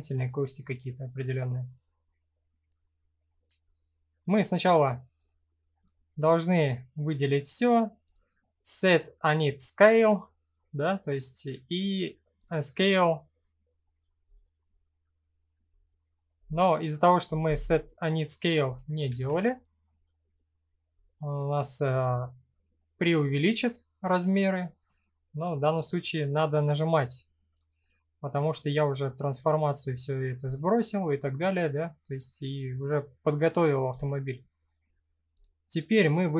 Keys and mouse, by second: 1.8 middle click, 4.9 click, 7.6 click, 12.0 click, 18.7 ctrl+z, 22.4 middle click, 24.0 middle click, 25.4 click, 30.0 click, 31.6 middle click, 35.0 click.